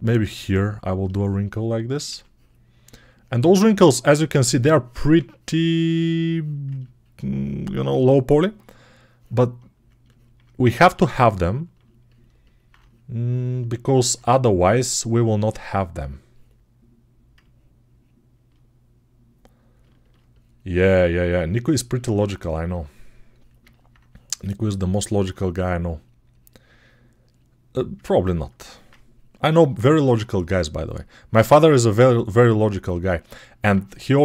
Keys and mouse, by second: 1.9 1, 19.8-22.3 ctrl+alt+right drag, 22.3-28.8 drag, 28.8-33.2 ctrl+right drag, 33.2-34.2 alt+drag.